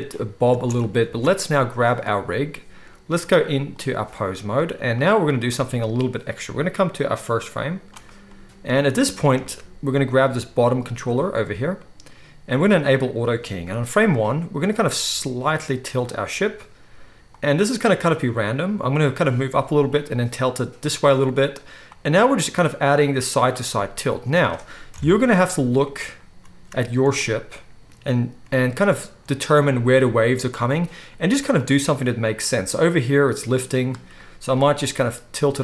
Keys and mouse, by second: 0.5 space, 1.1 ctrl+s, 1.8-4.0 drag, 1.8-10.3 middle drag, 5.0 click, 5.0 right click, 10.3-12.9 right drag, 12.9 middle click, 13.0-17.4 right drag, 17.4-21.0 drag, 21.0-21.8 middle drag, 21.0-21.8 right drag, 21.8 drag, 22.4 middle drag, 23.7 middle click, 23.9 middle click, 24.1-29.5 middle drag, 27.6-29.5 drag, 27.6-31.8 right drag, 31.6 drag, 31.6-35.6 middle drag.